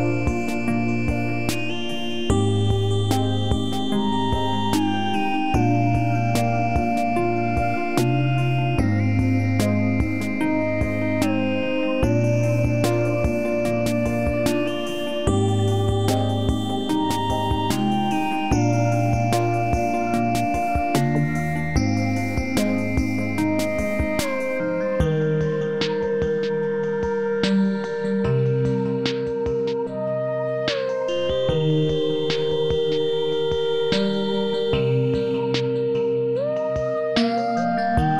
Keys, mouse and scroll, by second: 7.5-7.9 scroll up 1, 9.2 click, 11.6 click, 13.9 click, 20.1 click, 33.4-38.1 drag.